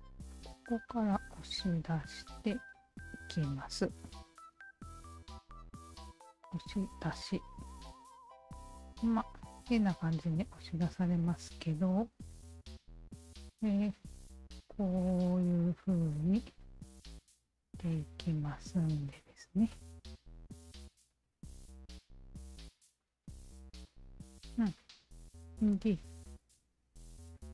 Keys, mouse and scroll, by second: 0.3 alt+click, 1.2 q, 1.4-3.9 alt+drag, 4.1 alt+middle click, 4.6 alt+right click, 5.9 shift+q, 6.9 click, 8.3 click, 9.7-11.1 alt+drag, 12.0 w, 13.4 1, 14.4-16.2 alt+drag, 16.6 r, 17.8-19.4 drag, 19.7 alt+click, 21.2 w, 22.1 alt+click, 23.7-25.7 alt+drag, 26.4 alt+click, 27.4-27.5 alt+drag.